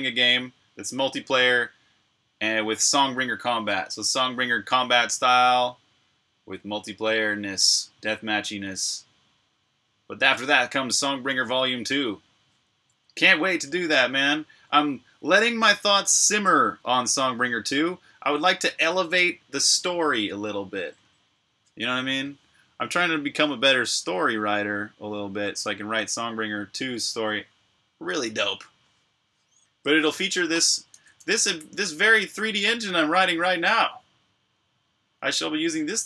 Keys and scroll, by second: 30.8 super+r.